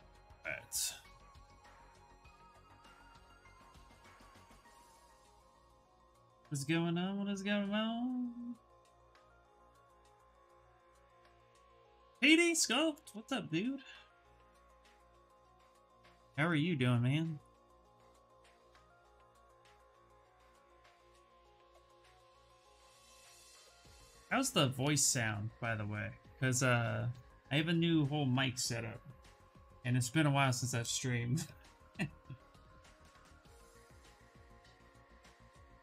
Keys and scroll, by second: 32.9 ctrl+n.